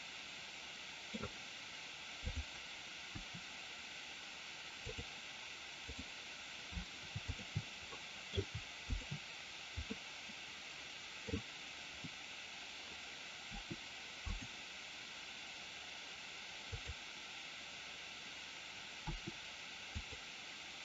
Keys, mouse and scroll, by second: 2.2 click, 2.9 r, 7.9 middle click, 8.9 shift+click, 9.9-11.2 middle drag, 13.4 r, 14.2 click, 16.6 click, 19.1 r, 20.0 click.